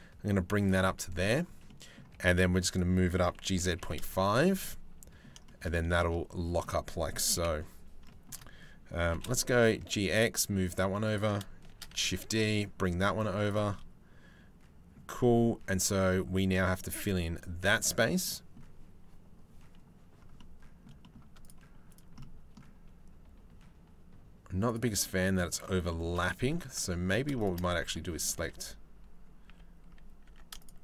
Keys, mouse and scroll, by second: 0.4 middle click, 1.3 middle click, 1.7 g, 2.8 g, 4.2 middle click, 5.0 shift+middle click, 5.3 middle click, 6.2 middle click, 6.9 KP_7, 7.6 shift+middle click, 8.6 g, 11.3 shift+d, 13.3 middle click, 14.3 middle click, 14.8 click, 15.7 click, 17.8 click, 20.0 middle click, 20.6 middle click, 21.0 middle click, 21.8 middle click, 24.6 middle click, 25.5 shift+middle click, 27.0 shift+click, 27.4 Tab, 29.0 a, 29.9 Tab, 30.5 shift+right click.